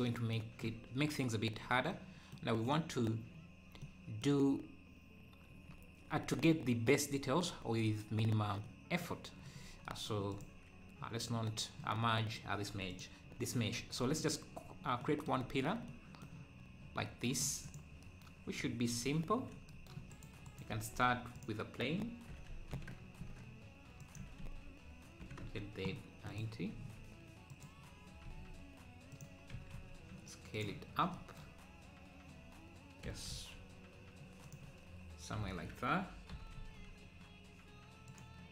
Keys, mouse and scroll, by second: 1.6 scroll down 1, 1.9-3.4 middle drag, 3.4-3.8 scroll up 2, 3.8 middle click, 4.6-5.3 scroll down 2, 5.3 scroll down 1, 8.7 middle click, 9.6 scroll up 1, 10.3-11.5 drag, 12.9 click, 13.2 KP_7, 13.6-14.0 scroll up 2, 14.7 scroll down 3, 15.0 middle click, 15.4-16.0 scroll up 4, 16.0 middle click, 16.6-17.0 scroll up 2, 17.0 middle click, 17.6 click, 20.1 shift+right click, 20.7 shift+a, 22.3 r, 26.7 s, 30.9 scroll down 3, 30.9 s, 33.0 g, 33.3 g, 36.3 g.